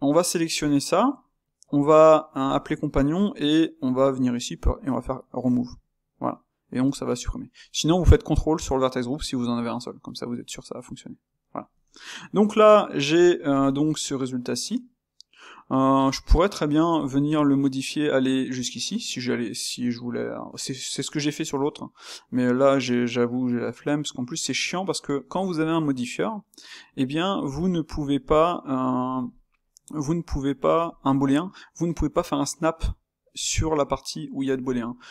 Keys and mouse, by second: 10.6-11.8 middle drag, 11.8 Tab, 12.6-26.8 middle drag, 26.8 click, 28.2 space, 30.8-35.1 ctrl+middle drag.